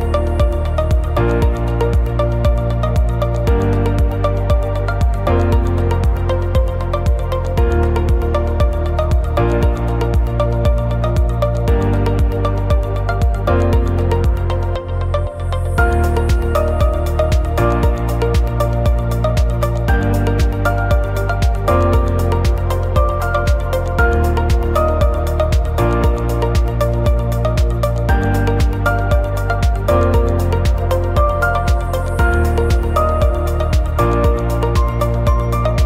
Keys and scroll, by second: 4.6 ctrl+shift+[, 5.8 ctrl+shift+a, 13.7 ctrl+shift+a, 19.4 ctrl+shift+a, 20.3 ctrl+-, 21.1 ctrl+=, 25.4 ctrl+shift+a, 26.0 ctrl+-, 26.7 ctrl+=, 28.7 ctrl+shift+a, 29.7 ctrl+=, 31.2 ctrl+shift+a, 32.0 ctrl+shift+], 32.4 ctrl+c, 32.5 ctrl+e.